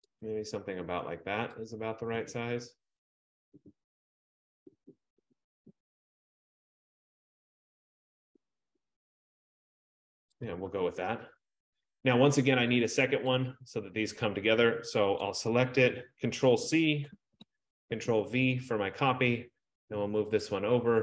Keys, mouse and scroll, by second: 0.2 shift+click, 10.5 shift+click, 13.0 click, 13.5 click, 15.4 click, 17.5 ctrl+c, 18.0 ctrl+v, 20.5 click.